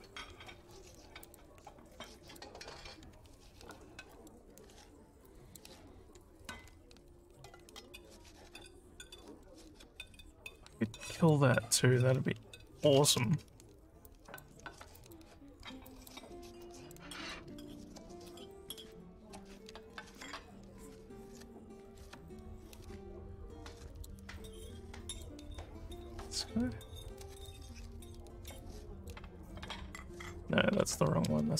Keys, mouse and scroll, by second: 1.2 click, 2.3 click, 3.7 alt+scroll up 2, 4.2 alt+middle click, 5.3 click, 7.9 click, 9.3 click, 10.6 click, 11.2 click, 12.3-12.6 scroll up 3, 14.1 alt+click, 15.0 click, 16.0 click, 16.7 click, 17.9 alt+scroll down 3, 18.6 click, 19.9-22.0 alt+middle drag, 22.3-24.1 alt+drag, 24.4 alt+click, 26.0 click, 27.2 click, 28.7 alt+click.